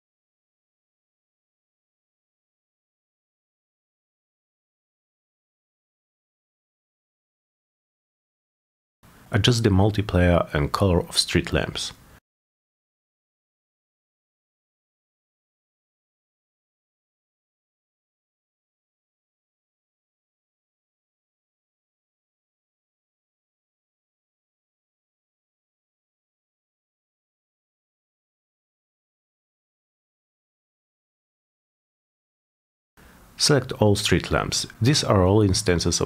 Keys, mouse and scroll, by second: 0.0-1.3 typing, 3.3-3.7 drag, 4.3 click, 5.5-6.6 drag, 7.7 click, 9.3-9.8 drag, 10.6 click, 11.3 click, 11.4 click, 13.2-14.5 typing, 14.6 Return, 16.7 click, 17.2 click, 17.7 click, 17.8 click, 18.9-20.2 typing, 23.2 drag, 23.9 click, 25.0 click, 26.0 click, 27.0 click, 28.0 click, 28.6 click, 29.4 click, 30.1 click, 30.8 click, 31.3 middle click, 31.5 middle click, 32.1 click, 33.2 click, 33.7 click, 34.4 click, 35.7 click.